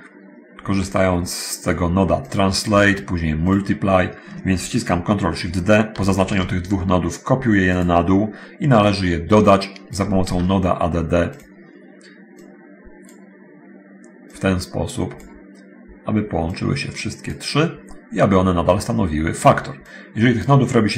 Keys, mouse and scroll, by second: 0.7-1.9 middle drag, 2.1 click, 6.3 ctrl+shift+d, 9.1-10.3 drag, 11.3 click, 12.6-13.5 drag, 14.2-15.6 drag, 16.7 click, 20.1-20.8 drag.